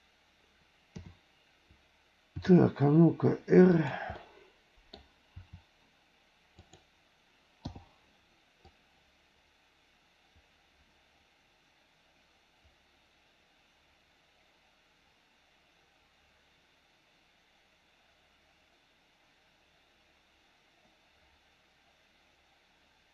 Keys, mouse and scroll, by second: 0.9 KP_7, 2.4 r, 4.1 middle click, 5.3 r, 7.6 i, 8.6-23.1 drag.